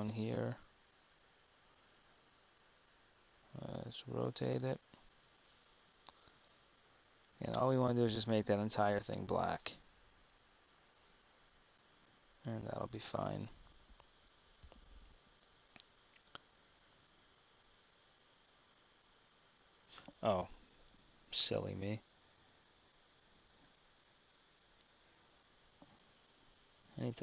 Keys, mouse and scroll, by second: 6.0 r, 11.8 Tab, 17.9 Tab.